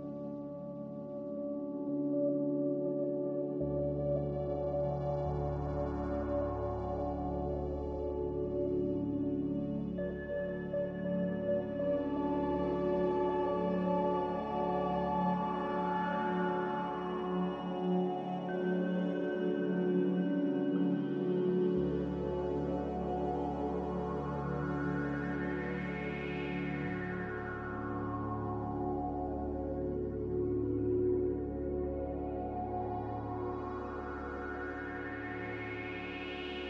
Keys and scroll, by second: 0.1-0.9 typing, 2.7-3.4 typing, 9.7 1, 9.9 0, 10.1 Return, 17.7 g, 18.9 g, 31.3 z.